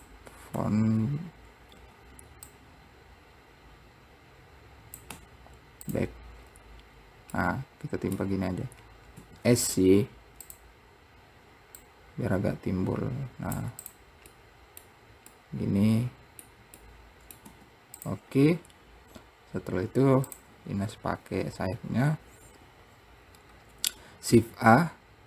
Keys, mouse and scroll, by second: 2.7 click, 6.6-7.1 scroll up 2, 7.6-9.3 middle drag, 9.3 s, 11.9 click, 14.0 click, 14.5-17.6 middle drag, 20.0-20.5 scroll down 3, 20.5 click, 23.7-24.6 scroll up 1, 24.6 shift+a.